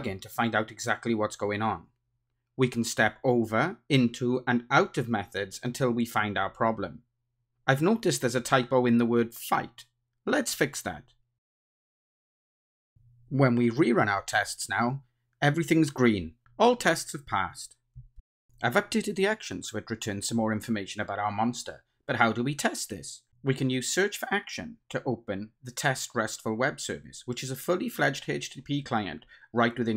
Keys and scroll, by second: 2.0 ctrl+d, 4.7 F7, 6.6 shift+F8, 7.3 F8, 10.1 super+e, 12.6 super+F2, 14.2 ctrl+r, 21.2 ctrl+shift+super+a.